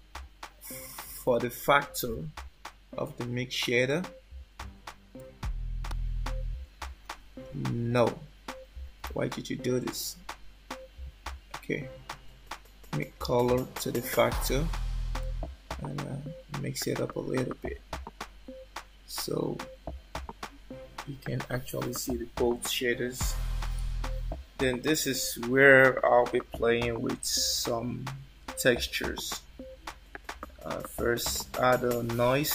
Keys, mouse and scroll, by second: 5.1 click, 9.1 ctrl+z, 10.0 click, 12.1 click, 15.2 click, 28.8 shift+a.